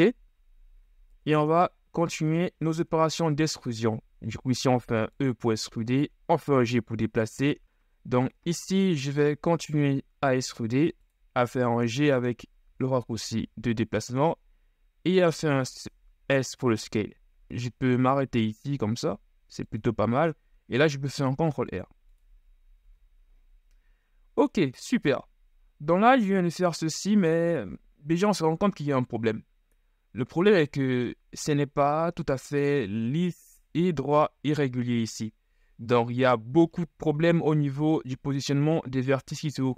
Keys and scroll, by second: 1.2 KP_1, 1.9 z, 3.8 e, 7.4 s, 10.0 ctrl+shift+e, 11.5 g, 12.7 s, 17.5 s, 21.0 ctrl+r, 22.9 z.